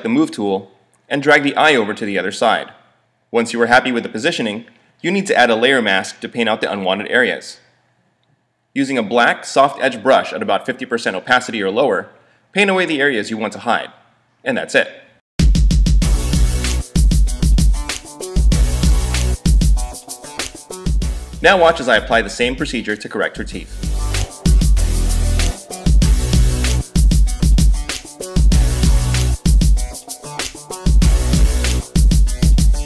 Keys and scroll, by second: 8.8 space, 12.5 space, 16.1 space, 18.0 super+0, 18.5 super+=, 18.9 space, 21.1 z, 23.9 space, 24.0 i, 24.3 space, 30.6 super+j.